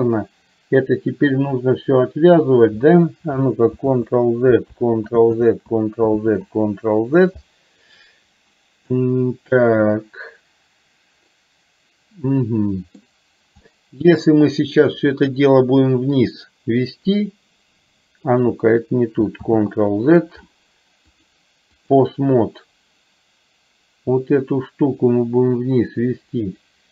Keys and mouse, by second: 3.8 ctrl+z, 4.8 ctrl+z, 6.3 ctrl+z, 9.1-13.1 middle drag, 13.7 middle click, 15.0 click, 16.2-18.5 drag, 19.6 ctrl+z, 21.2-22.3 drag, 24.7-26.9 drag.